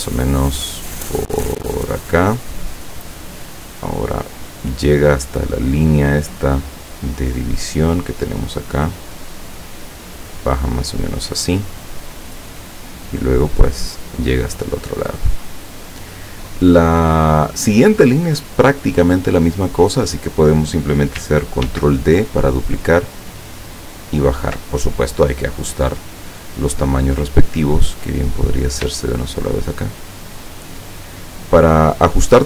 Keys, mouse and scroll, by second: 2.8 click, 8.5 click, 10.7 click, 11.8 click, 15.1 click, 19.7 click, 21.7 ctrl+d, 22.5-24.6 ctrl+drag, 26.0 click, 27.5 click, 29.2 shift+click.